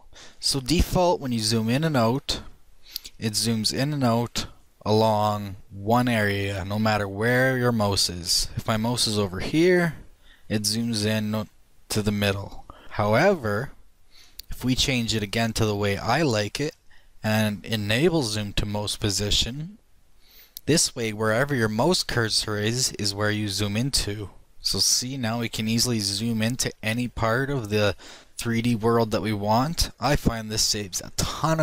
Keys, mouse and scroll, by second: 2.6 click, 3.1-11.2 middle drag, 13.0 shift+middle click, 13.3 shift+middle drag, 14.7-16.5 drag, 23.5 middle click, 25.0-25.9 middle drag, 26.7-27.4 right drag, 28.4-31.6 middle drag.